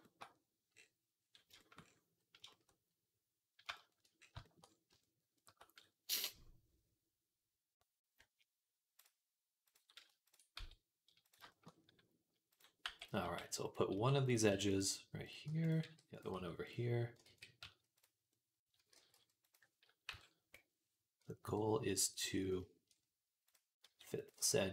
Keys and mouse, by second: 9.6-15.1 middle drag, 10.4 x, 12.7-16.2 typing, 15.1 click, 15.5 middle click, 17.1 ctrl+z, 17.4 s, 17.8-21.3 drag, 18.6 a, 18.8 g, 19.9 KP_1, 21.3 KP_3, 23.3 click, 23.7 s, 24.2 g.